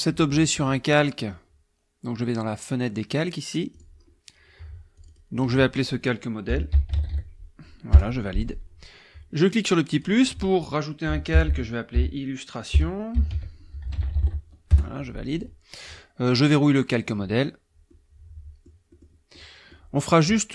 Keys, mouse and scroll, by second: 0.9 click, 3.7 click, 5.0 click, 6.2-7.6 typing, 7.9 Return, 9.9 click, 11.1-14.7 typing, 16.4 click, 17.9 click, 18.9 click, 19.3 click.